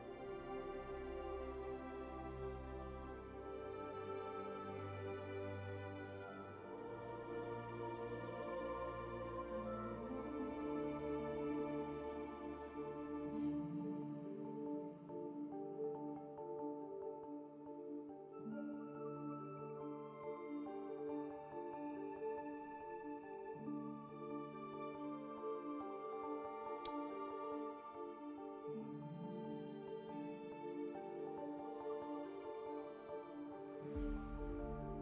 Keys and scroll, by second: 21.3 alt+s, 22.4 1.